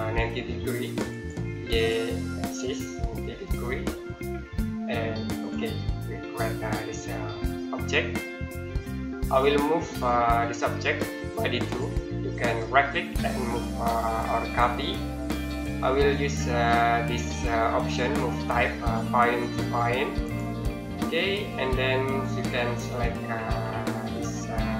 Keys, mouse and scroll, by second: 3.1 KP_9, 3.5 KP_0, 5.2 click, 5.7 scroll down 1, 5.9-6.5 scroll up 1, 6.8 middle click, 7.6-8.1 scroll down 1, 8.1-8.6 scroll up 1, 8.6 middle click, 11.5 click, 12.3 right click, 14.3 click, 20.0 click, 22.3 scroll down 1.